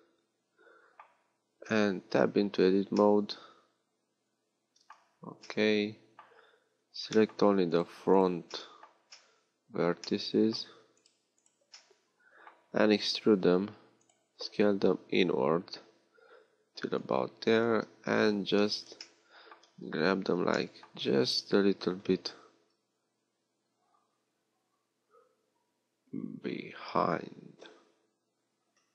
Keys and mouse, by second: 2.1 Tab, 4.9 z, 6.6 z, 17.7 KP_3, 18.6 z.